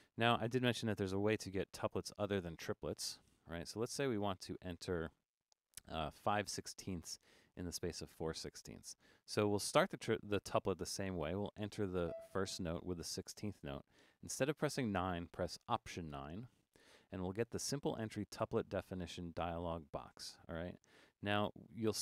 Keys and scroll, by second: 4.3 3, 16.1 alt+9.